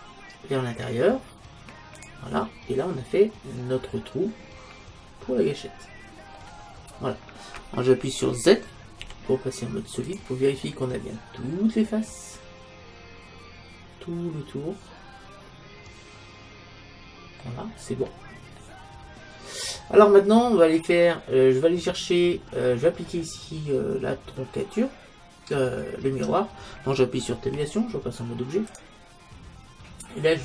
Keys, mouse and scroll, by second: 2.0 e, 2.1-3.8 drag, 4.0 middle click, 7.0-8.8 middle drag, 9.0 z, 10.7-12.4 middle drag, 17.7-20.3 middle drag, 21.7-24.3 middle drag, 27.5 Tab.